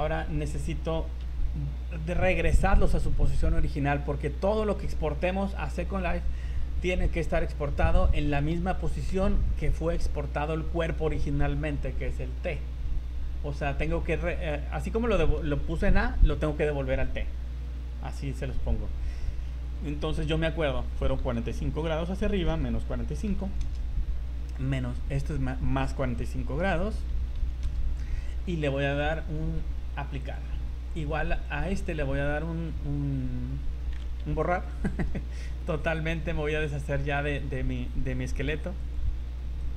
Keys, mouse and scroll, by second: 0.4 right click, 1.2 KP_1, 19.9 scroll down 2, 20.1 scroll up 2, 21.2 r, 25.2 right click, 26.0 r, 29.0 right click, 30.2 click, 31.5 right click, 34.4 shift+right click, 36.6 right click, 38.3 click, 39.6 shift+right click.